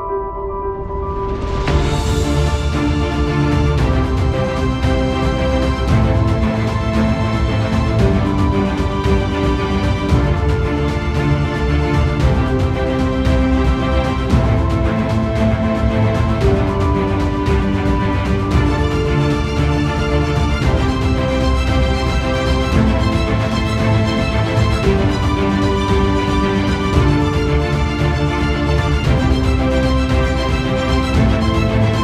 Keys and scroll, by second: 6.5 ctrl+-.